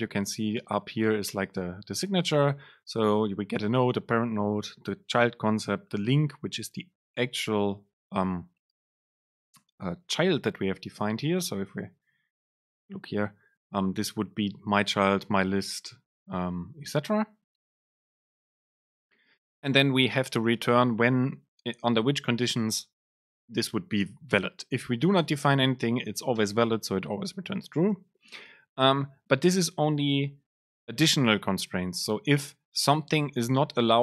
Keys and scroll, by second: 25.1 BackSpace.